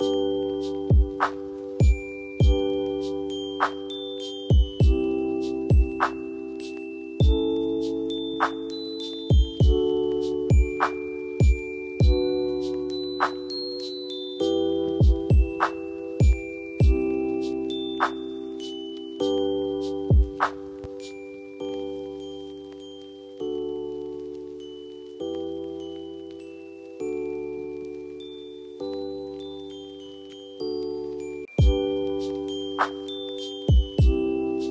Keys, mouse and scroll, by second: 10.4 shift+click, 11.2 c, 11.9 click, 12.7 F3, 13.2 F2, 14.2-14.5 click, 18.2 c, 18.9 click, 19.6 F4, 20.7-21.4 drag, 26.4 right click, 27.2 click, 31.4 right click, 32.5 click, 32.7 F2, 33.0-34.2 drag.